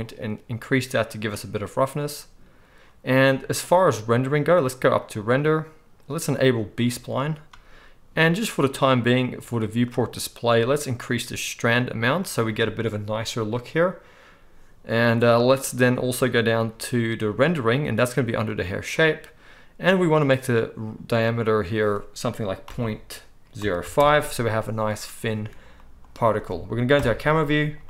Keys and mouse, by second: 7.0-9.9 right drag, 9.9-27.8 middle drag, 26.9 KP_0.